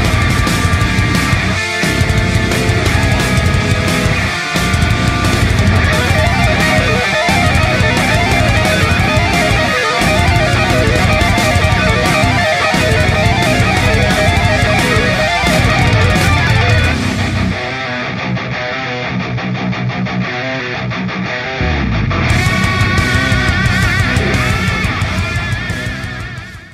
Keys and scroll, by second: 4.5 ctrl+d, 4.6 ctrl+d, 4.8 ctrl+d, 4.9 ctrl+d, 5.1 ctrl+d, 5.2 ctrl+d, 5.3 ctrl+d, 5.5 ctrl+d, 5.6 ctrl+d, 5.8 ctrl+d, 12.5 ctrl+d, 12.7 ctrl+d, 12.8 ctrl+d, 13.0 ctrl+d, 14.9 ctrl+d, 15.2 ctrl+d, 15.4 ctrl+d, 16.5 ctrl+d, 16.6 ctrl+d, 16.8 ctrl+d, 17.0 ctrl+d, 17.1 ctrl+d, 18.5 ctrl+d, 18.6 ctrl+d, 18.8 ctrl+d, 19.0 ctrl+d, 19.1 ctrl+d, 20.1-20.8 space.